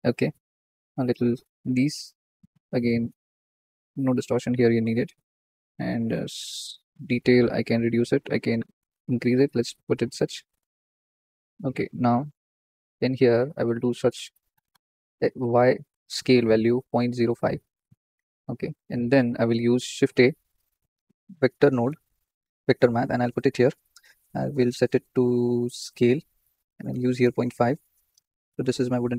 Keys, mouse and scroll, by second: 0.5-4.0 drag, 4.0 ctrl+z, 5.8-8.0 drag, 9.5-17.3 drag, 17.3 scroll down 2, 20.2-23.3 drag, 23.9-29.1 drag, 28.6-29.1 scroll down 1.